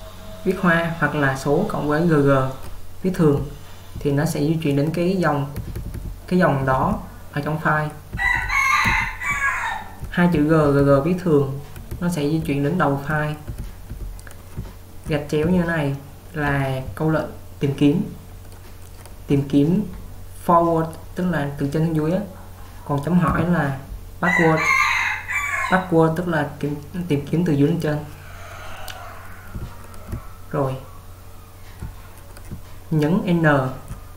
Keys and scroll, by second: 2.1 typing, 3.7 typing, 5.6-6.9 typing, 8.2-10.9 typing, 12.0-12.5 typing, 13.5 typing, 23.5 j, 29.5-31.3 typing, 32.6-34.1 typing.